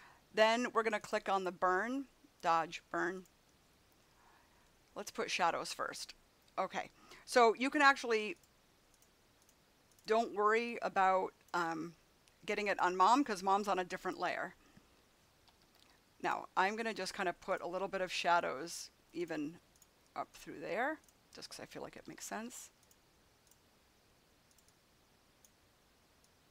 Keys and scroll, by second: 7.4 [, 15.3 ], 21.9 [.